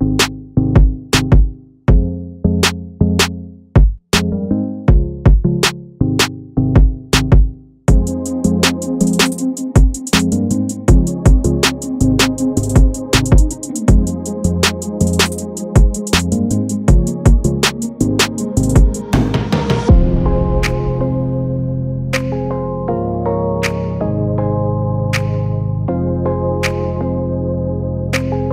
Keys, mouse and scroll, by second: 0.3 g, 1.6 s, 2.7 Tab, 3.1 Tab, 3.4-4.6 right drag, 4.6 Tab, 4.9-5.3 scroll up 3, 5.3 shift+middle click, 5.8 Tab, 6.0 scroll up 2, 6.2-6.6 scroll down 1, 6.6-7.8 middle drag, 7.8 click, 9.0-12.2 drag, 12.2 scroll down 1, 12.2 middle click, 13.2-13.6 scroll up 4, 13.6 scroll down 1, 13.9 Tab, 14.4 Tab, 14.5 scroll down 3, 14.8 middle click, 15.0 scroll up 1, 15.8-16.9 drag, 17.4 click, 18.0 click, 18.7 KP_0, 19.9-21.6 drag, 21.8 scroll up 1, 21.9 middle click, 22.5-23.5 scroll up 4, 23.5 click, 24.0 KP_0, 25.1 scroll down 3, 25.3 middle click, 26.0 scroll down 1, 26.1 middle click, 26.2-26.6 scroll up 1, 26.6-27.7 drag, 27.7 Tab, 28.0 Tab.